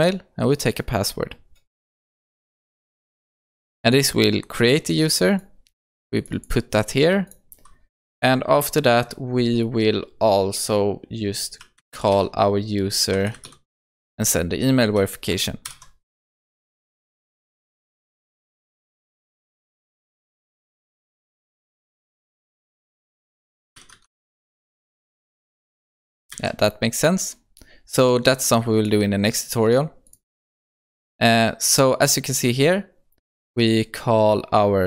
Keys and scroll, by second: 14.8 Return, 26.4 ctrl+s.